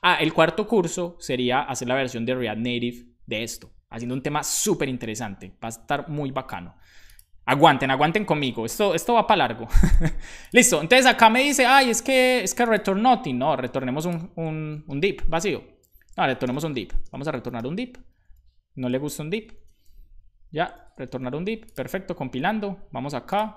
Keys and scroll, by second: 15.0 Tab, 15.6-18.8 typing, 19.5 super+s, 21.0 super+s.